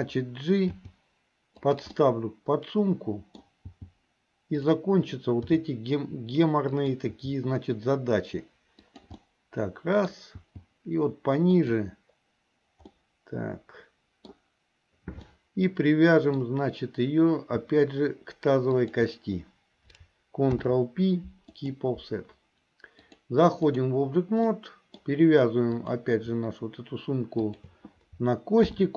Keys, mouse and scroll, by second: 0.7 g, 2.1-3.6 middle drag, 3.8 g, 5.5 r, 7.1 g, 9.3 middle click, 10.4 g, 13.0-14.5 middle drag, 15.3-16.6 middle drag, 18.8 shift+click, 20.5 ctrl+p, 23.1-24.1 drag, 24.6 middle click, 25.9 click, 27.4 shift+click, 28.6 ctrl+p.